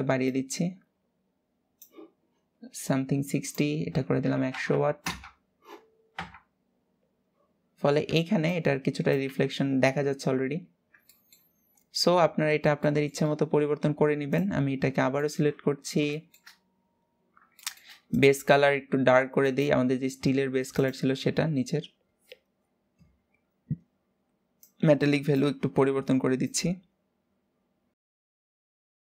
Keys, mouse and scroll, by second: 0.1-4.7 drag, 4.7 KP_0, 5.8 KP_0, 10.2-10.8 scroll down 2, 10.8 shift+middle click, 11.4 scroll up 1, 12.5-12.9 shift+middle drag, 12.9-14.0 scroll up 5, 14.0 click, 14.8 shift+middle click, 15.5 scroll down 5, 15.8 shift+middle click, 16.4-17.2 scroll up 2, 17.2-17.8 shift+middle drag, 17.8 click, 24.2-28.2 drag, 28.4-29.1 drag.